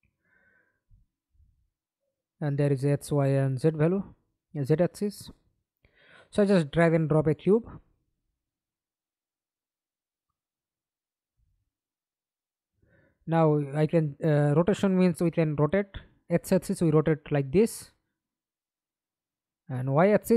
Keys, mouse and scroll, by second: 1.6 double click, 6.8 f, 7.4-7.9 scroll down 3, 7.9 alt+click, 14.6 alt+click.